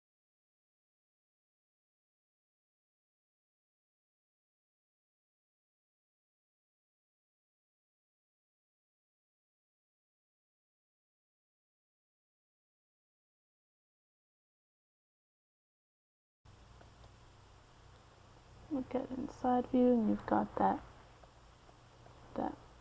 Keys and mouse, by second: 1.8-9.4 drag, 9.4 middle click, 10.2-14.9 drag, 15.5 middle click, 19.4 click, 21.7-22.8 d, 22.5-22.8 drag.